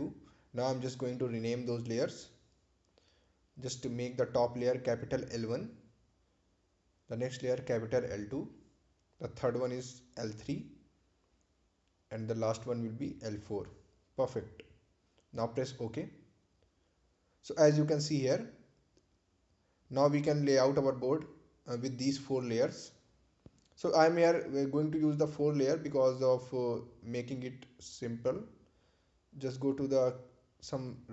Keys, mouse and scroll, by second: 7.5-8.5 typing, 9.5 Return, 10.6 click, 11.3 l, 12.0 l, 12.8 Return, 13.8 click, 14.6 l, 15.3 l, 16.1 Return, 16.9 click, 17.7-18.8 typing, 19.1 Return, 20.9 click, 23.5 click.